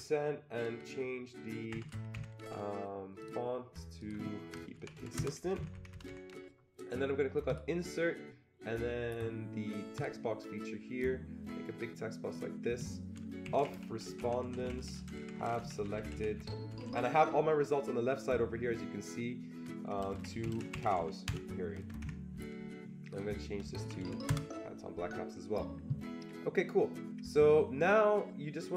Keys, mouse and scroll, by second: 1.7 shift+5, 2.1 Escape, 3.2 click, 4.0 click, 4.6-5.4 typing, 5.6 Escape, 5.7 Escape, 5.9 Escape, 7.4 click, 9.9 click, 11.2-13.7 drag, 13.2-17.3 typing, 20.0-22.0 typing, 22.1 Escape, 23.1 click, 23.5-24.5 typing.